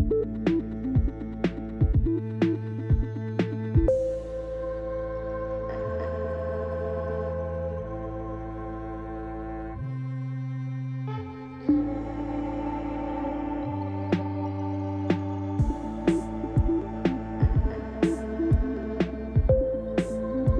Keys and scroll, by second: 0.8 Right, 2.3 r, 4.1 Return, 5.4 i, 9.2 alt+a.